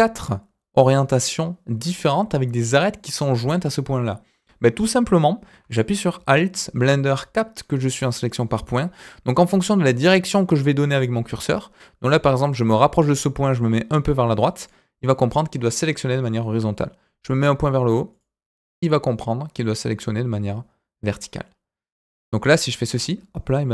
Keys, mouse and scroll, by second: 3.9-4.3 scroll down 1, 4.3 scroll up 1, 5.1-5.5 scroll up 1, 5.5-6.1 scroll down 1, 14.6 alt+click, 18.1 alt+click, 21.5 scroll down 2, 21.9 scroll up 2, 22.6 alt+click, 23.1-23.4 scroll down 2, 23.4-23.7 middle drag.